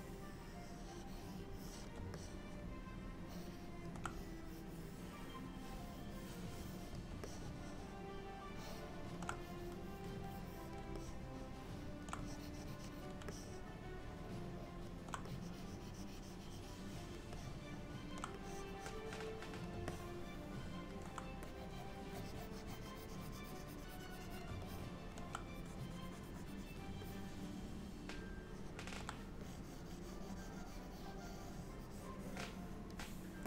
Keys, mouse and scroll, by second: 2.2 middle click, 4.2 click, 7.3 middle click, 9.5 click, 11.1 middle click, 12.3 click, 13.4 middle click, 15.3 click, 17.5 middle click, 18.5 click, 20.0 middle click, 21.5 click, 22.2 click, 24.0 click, 24.2 click, 24.7 middle click, 25.6 click, 27.1 middle click, 29.5 click.